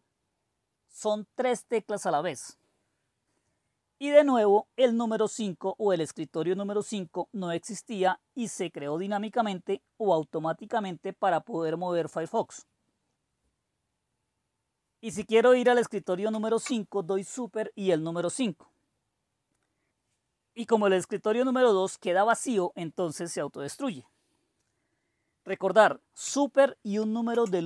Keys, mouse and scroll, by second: 16.2 super+5, 27.2 super+1.